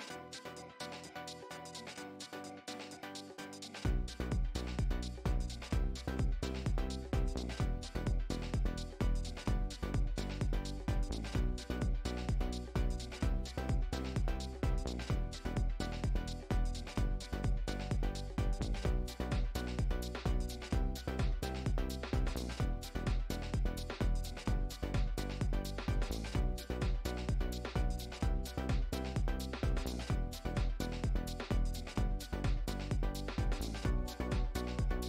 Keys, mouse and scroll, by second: 0.1 shift+middle click, 0.6 1, 2.5-2.9 scroll up 1, 2.9 scroll down 1, 3.0-4.6 scroll up 1, 5.2 scroll up 1, 5.6 click, 6.2 click, 11.2 scroll down 1, 12.3 click, 14.3 x, 17.8 click, 18.2 s, 20.9 click, 23.9 middle click, 24.4 scroll down 2, 24.6 middle click, 26.1-26.4 scroll up 1, 26.4 Tab, 26.8 Tab, 33.0 middle click, 33.1 Tab.